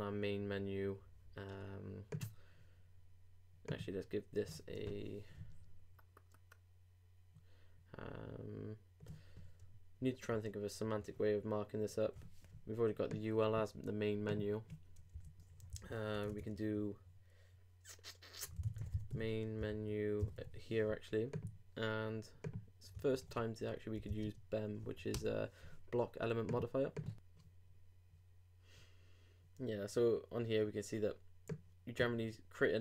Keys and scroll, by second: 23.1 super+t, 23.7 super+b.